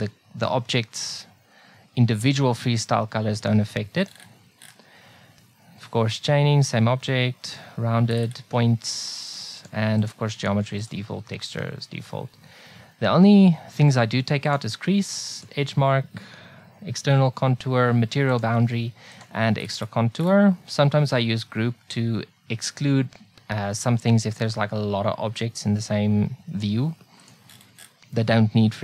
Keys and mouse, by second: 9.0-12.6 drag, 14.5-17.1 drag, 18.3-28.8 drag.